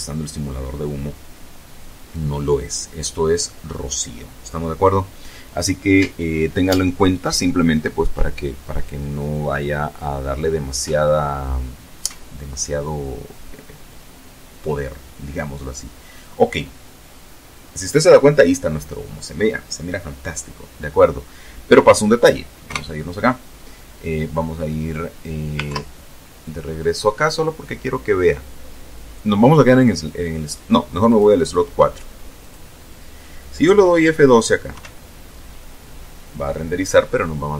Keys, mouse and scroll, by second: 21.0 KP_0, 24.0 ctrl+Left, 29.3 click, 30.7 click, 33.0 F12.